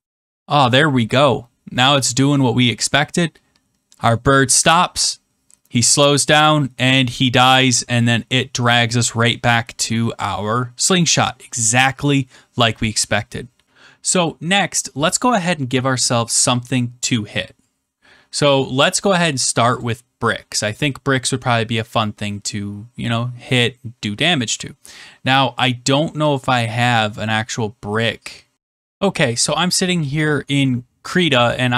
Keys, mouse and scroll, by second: 13.6 click, 19.7 click, 20.7 click, 26.3 click, 27.3-28.5 drag, 29.3-30.4 drag.